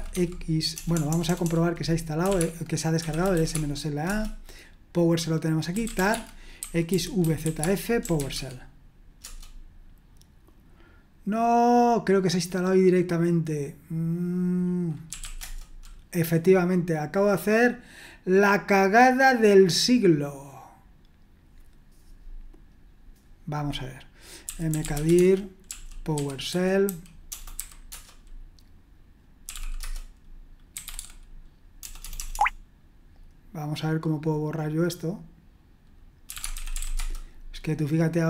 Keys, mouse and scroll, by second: 0.0-4.1 typing, 5.5-9.2 typing, 14.8-15.7 typing, 24.2-27.9 typing, 29.2-32.3 typing, 36.0-37.3 typing.